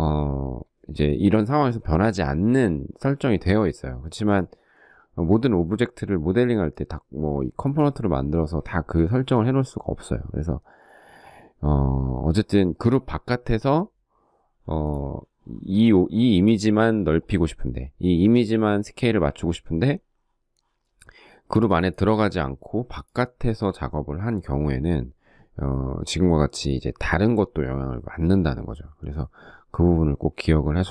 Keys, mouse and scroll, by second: 15.6 shift+middle click.